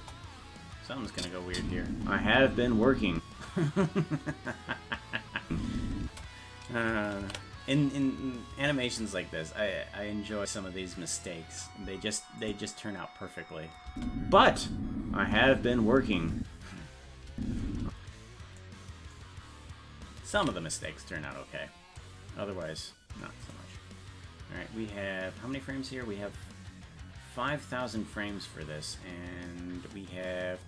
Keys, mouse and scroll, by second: 1.1 click, 1.5 space, 3.9 space, 7.6 ctrl+s, 12.4 click, 13.9 space, 19.6 scroll down 1, 20.8 ctrl+s, 20.8-21.7 scroll down 2, 22.0-22.8 scroll down 3, 24.2-24.7 scroll down 1.